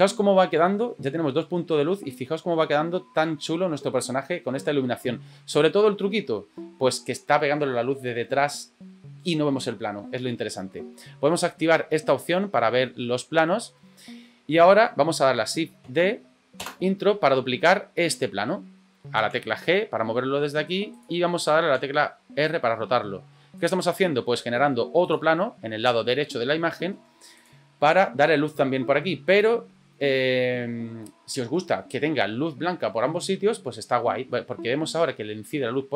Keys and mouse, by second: 12.1 click, 15.8 shift+d, 19.4 g, 21.8 r, 24.5 g, 26.9 g.